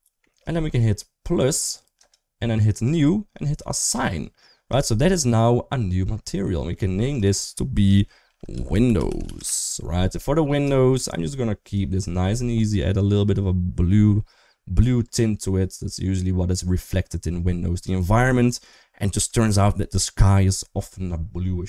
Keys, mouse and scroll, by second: 1.9 click, 2.6 click, 3.6 click, 4.6 Tab, 4.9-6.2 middle drag, 6.9 click, 7.1-9.2 drag, 10.1 middle click, 10.5 shift+middle click, 11.5 click.